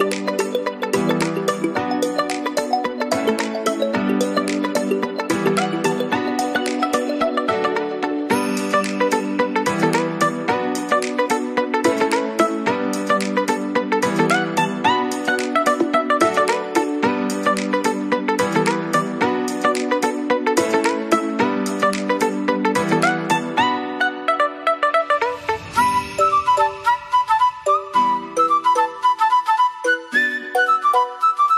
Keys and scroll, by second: 17.8 ctrl+0, 26.6 Left, 27.0-29.2 typing, 27.2 Right, 27.6 Right, 28.1 Right, 28.7 Right, 29.0 Right, 30.4 ctrl+z.